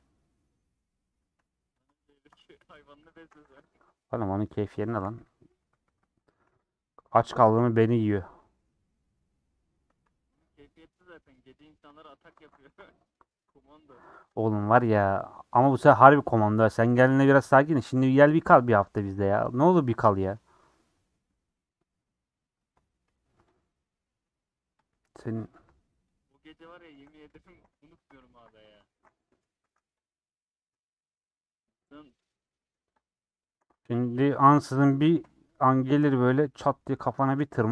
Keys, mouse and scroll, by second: 1.8 Left, 2.7 middle click, 3.1 a, 3.6 u, 4.0 middle click, 5.0 /, 6.2 Tab, 6.4 h, 6.6 click, 7.5 /, 7.7 middle click, 8.0 Tab, 8.3-12.3 middle drag, 12.3 alt+z, 12.6 3, 12.8-15.3 middle drag, 15.3 click, 15.8-22.6 shift+middle drag, 22.6 click, 25.7 shift+click, 26.8 shift+click, 27.6 ;, 27.8 middle click, 28.4 alt+z, 28.9 alt+z, 29.2 middle click, 29.6 3, 30.6 click, 32.4 shift+middle click, 32.9 shift+click, 33.7 alt+z, 33.9-35.2 middle drag, 35.2 ;, 35.7-37.3 middle drag, 37.3 a.